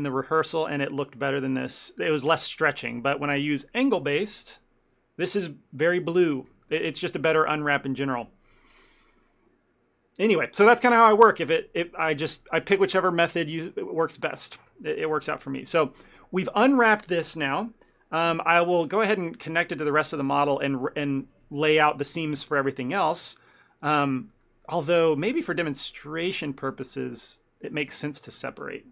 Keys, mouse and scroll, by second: 3.4 click, 6.4 shift+middle click, 6.7 ctrl+middle click, 7.6 shift+middle click, 18.8 ctrl+middle click, 19.0 shift+middle click, 19.4 middle click, 20.0 Tab, 20.5 shift+middle click, 23.3 click, 24.1 shift+middle click, 24.4 ctrl+middle click, 25.4 middle click, 26.9 middle click, 27.0 shift+middle click, 27.2 middle click, 28.0 Tab, 28.3 click.